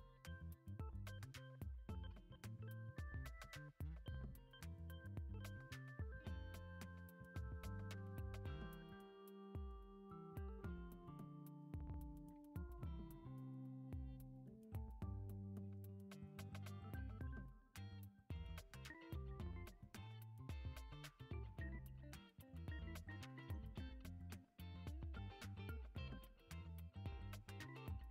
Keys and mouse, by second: 0.1 shift+click, 0.9 e, 2.0 s, 3.5 click, 4.2 s, 8.9 shift+middle click, 10.6 click, 11.8 click, 12.3 click, 14.4 click, 15.1 middle click, 16.2 e, 18.1 s, 20.3 KP_1, 21.3 g, 23.4 s, 24.8 shift+middle click, 25.5 shift+middle click, 26.3 click, 26.6 alt+z, 27.0 click, 27.7 click.